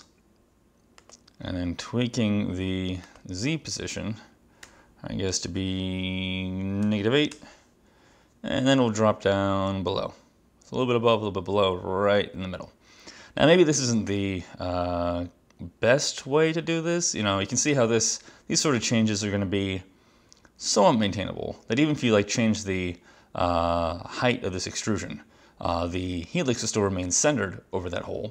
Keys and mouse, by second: 1.1 click, 4.8 -, 6.9 8, 7.5 Return.